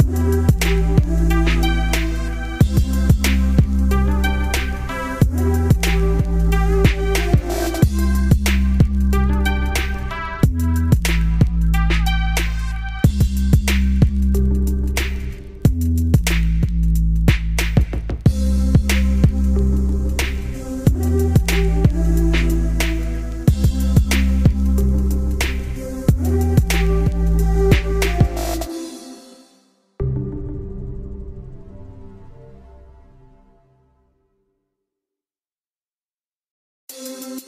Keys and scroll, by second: 16.5 ctrl+space, 16.7 ctrl+z.